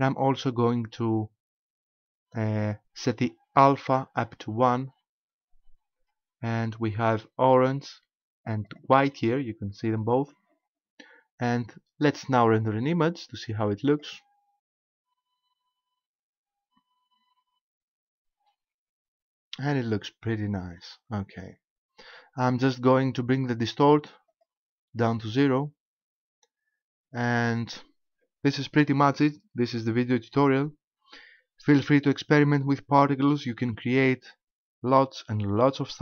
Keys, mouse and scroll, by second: 8.7 click, 12.1 click.